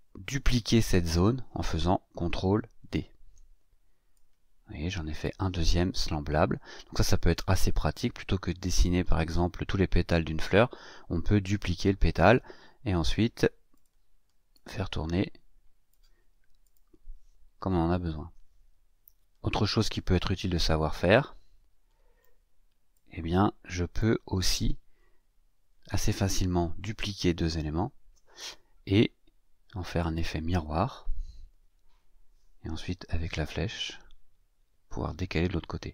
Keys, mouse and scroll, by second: 2.9 ctrl+d, 4.1-5.3 drag, 13.7 click, 14.5-16.0 drag, 16.6 click, 17.9 ctrl+scroll down 2, 21.1-22.4 drag, 22.9-24.2 drag, 27.7 ctrl+d, 30.0 click, 32.9 Right.